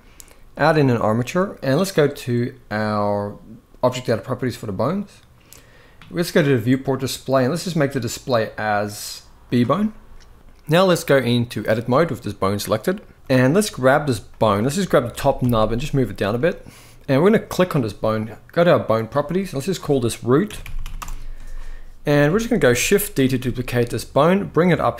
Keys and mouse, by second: 3.7 click, 6.0 click, 7.7-9.3 drag, 10.5-11.3 drag, 14.8 g, 16.9 click, 19.3-20.7 drag, 20.4 o, 22.1 shift+middle click, 22.9 shift+d.